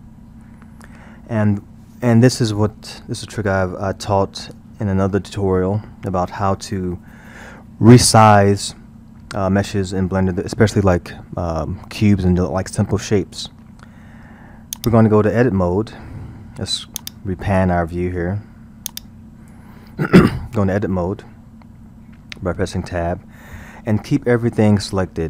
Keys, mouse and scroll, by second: 0.8-1.4 scroll, 14.8-15.7 drag, 15.7 scroll, 17.0-21.2 drag, 21.2-22.6 scroll, 22.6 Tab.